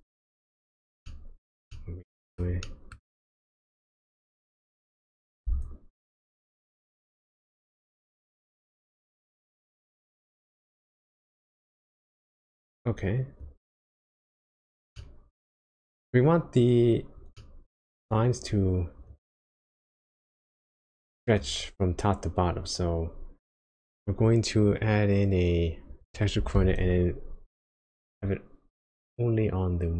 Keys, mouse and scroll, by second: 1.1 shift+middle click, 1.7 middle click, 2.7 shift+middle click, 3.3-3.9 scroll up 2, 4.1 shift+middle click, 4.9-5.4 scroll down 1, 5.6 ctrl+shift+click, 8.0 middle click, 11.2-11.8 scroll up 2, 11.8-13.4 scroll down 1, 13.4 click, 14.4 click, 15.0 middle click, 17.3 middle click, 17.9-19.1 scroll up 5, 19.1 click, 23.3-23.9 scroll down 2, 23.9-26.0 scroll down 2, 26.0 click, 26.5 shift+a.